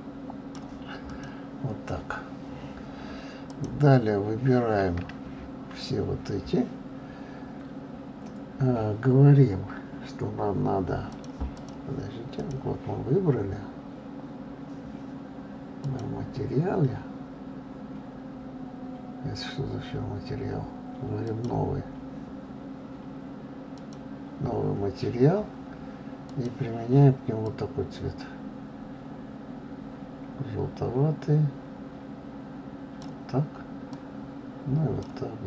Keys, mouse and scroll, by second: 1.1 click, 3.5 click, 11.1 click, 11.5 click, 12.4 click, 15.8 click, 21.2 click, 23.7 click, 26.3 click.